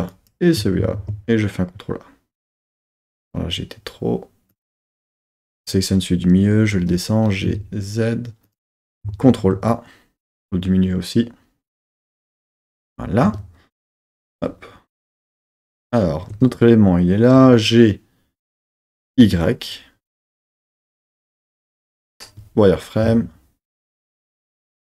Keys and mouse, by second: 0.1 shift+click, 0.5 shift+click, 0.9 ctrl+a, 4.5 click, 6.7 g, 7.4 a, 8.4 click, 9.2 ctrl+a, 11.9 click, 13.2 Tab, 14.1 KP_3, 19.1 g, 19.1 y, 21.5-21.9 drag, 21.9 z, 24.7 KP_1.